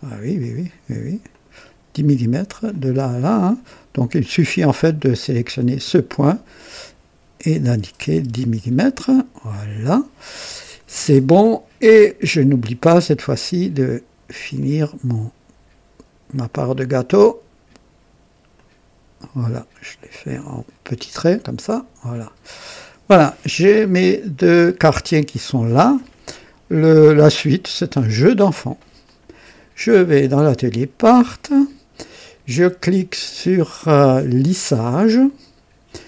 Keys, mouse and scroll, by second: 0.3 click, 1.3 click, 2.6 click, 3.4 click, 4.2 click, 5.5 click, 6.5 click, 7.7-8.4 typing, 8.2 Return, 9.4 click, 9.5 typing, 12.4 click, 14.5 click, 16.4 click, 18.5 click, 20.0 click, 22.1 click, 22.1 typing, 23.3-26.1 drag, 29.0 click, 30.4 click, 35.2 click.